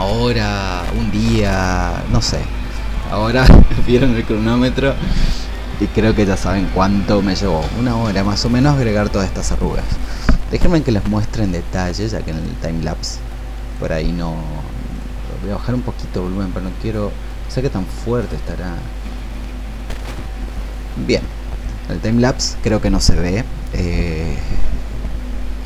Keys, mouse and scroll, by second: 16.4 scroll down 1, 17.3 scroll up 1, 18.2 click, 19.2 scroll down 1, 21.0-25.6 drag.